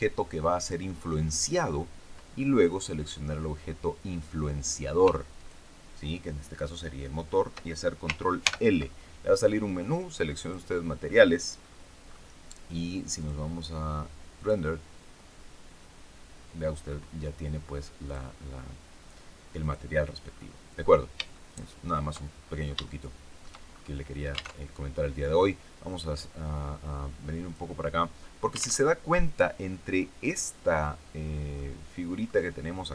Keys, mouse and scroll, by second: 5.3 shift+right click, 8.3 ctrl+l, 10.3 click, 11.5-11.8 scroll down 2, 13.1 click, 14.3 click, 18.0 click, 19.5 click, 20.1-20.6 scroll down 2, 20.7-21.3 scroll up 3, 21.3 shift+middle click, 22.3 shift+scroll down 3, 22.7 shift+middle click, 23.6-23.9 shift+scroll up 3, 24.5 alt+Tab, 25.8-27.7 drag, 28.7 alt+Tab, 31.5 middle click.